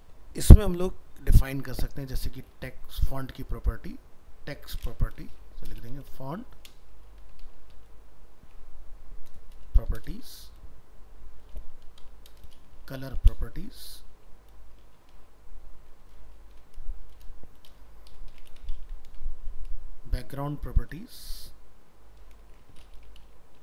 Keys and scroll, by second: 18.5 ctrl+c, 22.5 ctrl+shift+Right.